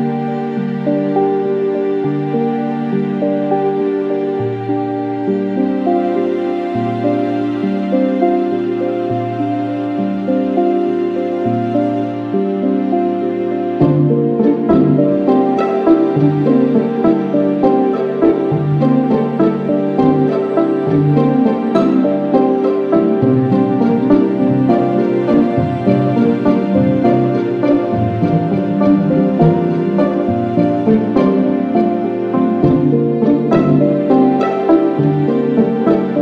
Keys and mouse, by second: 2.0 alt+click, 3.6 alt+click, 8.9 alt+click, 14.0 ctrl+-, 19.5 s, 21.1 alt+click, 30.7 alt+click, 34.0 alt+click.